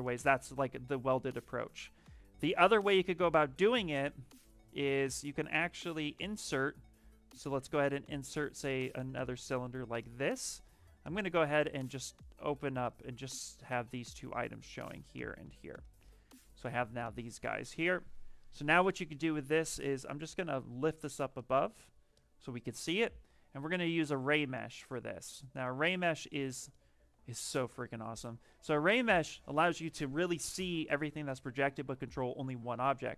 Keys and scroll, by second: 0.9 ctrl+z, 1.2 ctrl+z, 1.5 ctrl+z, 2.0 ctrl+z, 19.6 w, 21.0 q, 26.9 w.